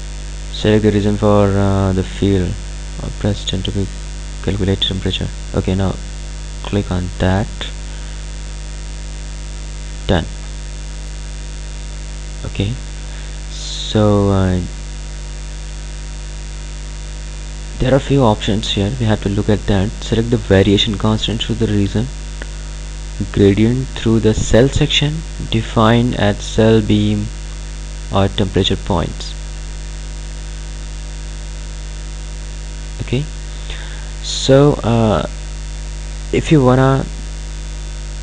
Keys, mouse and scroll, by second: 6.3 click, 9.3 click, 12.9 click, 22.1 click.